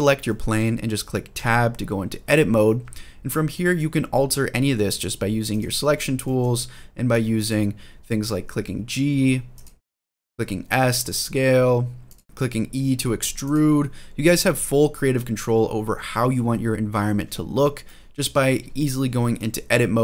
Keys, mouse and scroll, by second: 0.0 shift+middle drag, 1.3 Tab, 3.3 middle click, 5.3 click, 6.0 middle click, 6.9 click, 7.9 g, 9.4 click, 10.2 s, 11.9 click, 12.2 ctrl+z, 12.2 e, 13.2 click, 15.8 ctrl+z, 16.2 ctrl+z, 17.6 middle click.